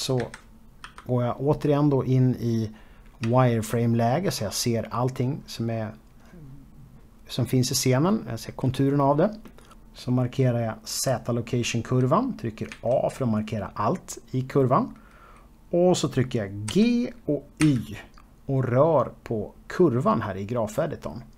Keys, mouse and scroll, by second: 0.4 4, 1.4-2.8 scroll up 1, 2.9 shift+middle click, 4.3-5.9 scroll up 1, 10.5 click, 12.3 a, 16.3 g.